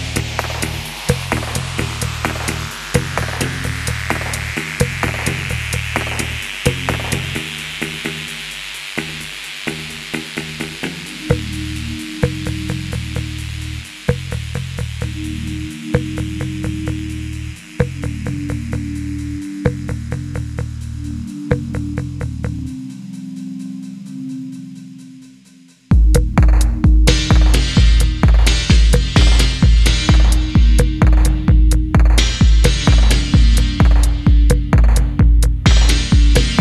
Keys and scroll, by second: 0.7 y, 1.0 3, 1.2 ., 2.5 ctrl+e, 3.2 shift+h, 4.4 typing, 8.9-9.3 typing, 11.2-14.9 typing, 12.7 alt+h, 15.1 Escape, 15.2 Escape, 15.3 ctrl+z, 16.0 g, 16.4 alt+a, 16.9 ctrl+v, 17.0 d, 18.2 alt+a, 19.1 alt+a, 21.9 e, 22.0 1, 22.2 Return, 22.4 ctrl+e, 24.4 f, 25.4 f, 26.3 ctrl+r, 27.4 ctrl+f, 27.5 g, 28.6 alt+a, 30.2 alt+a, 30.7-32.4 typing, 31.1 ctrl+z, 33.6 typing, 35.0 Tab, 36.0 3, 36.3 ctrl+space.